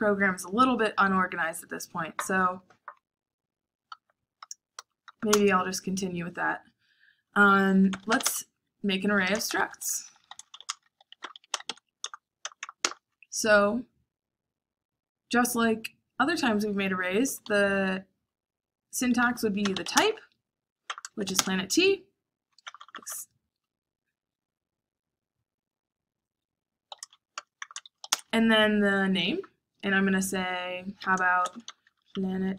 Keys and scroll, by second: 0.0-1.4 typing, 3.8-5.2 typing, 7.6-12.5 typing, 16.9-17.8 typing, 18.9-21.5 typing, 22.6 BackSpace, 22.7 BackSpace, 22.8 BackSpace, 23.0 BackSpace, 26.8-28.6 typing, 30.9-32.5 typing.